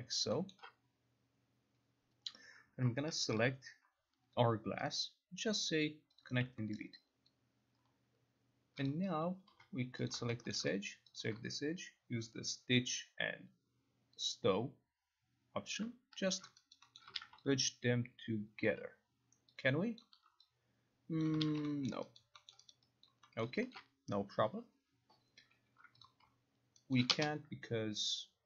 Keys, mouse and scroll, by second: 0.7 alt+middle click, 0.7 alt+right click, 2.9 alt+middle click, 3.4 ctrl+click, 5.0 right click, 6.3 click, 6.9 alt+middle click, 7.4 alt+click, 9.0 click, 9.3-10.2 typing, 10.2 click, 10.6 alt+middle click, 11.3 shift+click, 14.4 click, 15.9 click, 16.4 ctrl+click, 16.9 alt+right click, 17.1 alt+middle click, 17.3 ctrl+z, 18.7 alt+click, 19.8 alt+click, 20.1 ctrl+click, 21.3 alt+click, 21.5 ctrl+z, 22.0 alt+middle click, 22.3 alt+right click, 22.7 alt+middle click, 22.9 alt+right click, 23.2 alt+click, 23.5 alt+middle click, 23.5 alt+click, 23.8 alt+click, 23.8 alt+middle click, 26.1 click, 27.1 alt+right click.